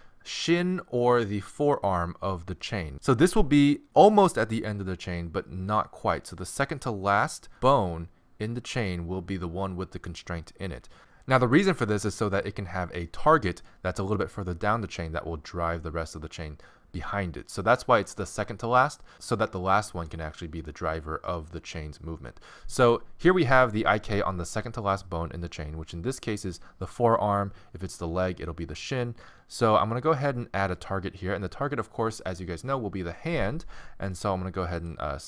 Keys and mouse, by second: 34.8-35.2 drag.